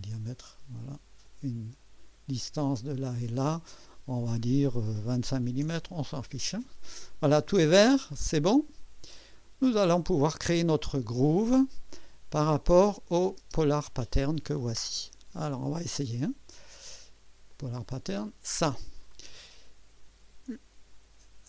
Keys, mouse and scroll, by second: 1.2 click, 3.0 click, 5.1 2, 5.5 KP_5, 5.8 Return, 9.1 click, 12.8 click, 13.4 space, 16.1 click, 17.5 click, 18.1 click.